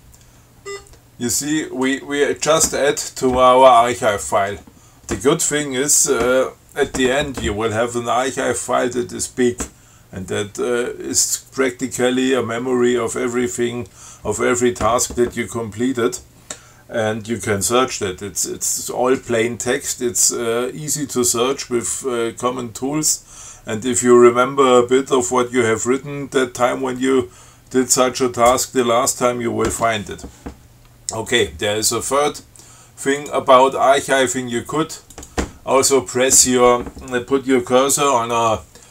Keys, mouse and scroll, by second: 0.8 scroll up 2, 31.6 click, 33.4 click, 35.4 click.